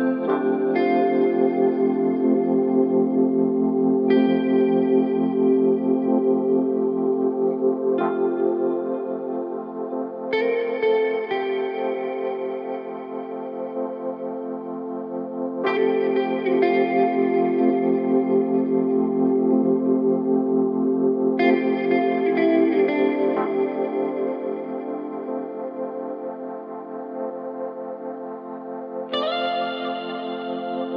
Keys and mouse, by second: 3.4-4.5 middle drag, 7.0-12.3 middle drag, 14.4 ctrl+s, 30.8-30.9 middle drag.